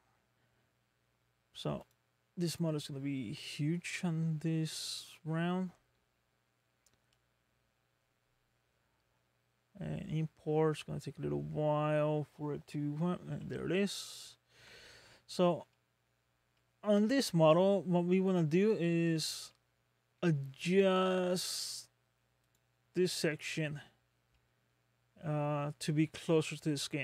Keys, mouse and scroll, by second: 13.2-13.8 scroll down 2, 14.0 shift+middle click, 15.0-15.7 scroll up 4, 15.7 middle click, 16.6 shift+middle click, 17.1 scroll up 3, 17.7 shift+middle click, 18.4 scroll up 2, 19.1 scroll up 1, 19.5 middle click, 22.4 click, 23.3 middle click, 24.3 middle click, 26.8 middle click.